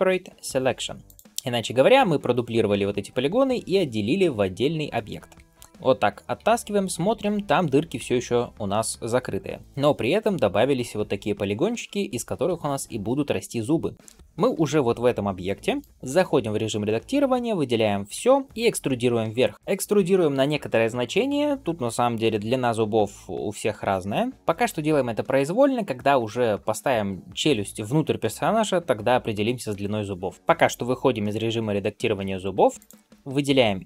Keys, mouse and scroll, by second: 5.3 Tab, 5.7 click, 6.2 g, 14.4 g, 16.0 Tab, 18.0 a, 18.4 middle click, 32.7 click.